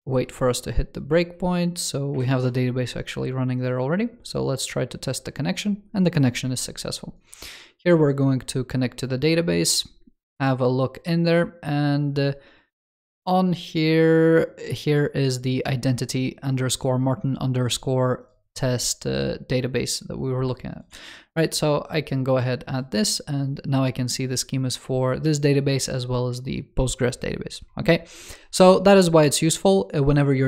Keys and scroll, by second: 2.4 ctrl+shift+super+].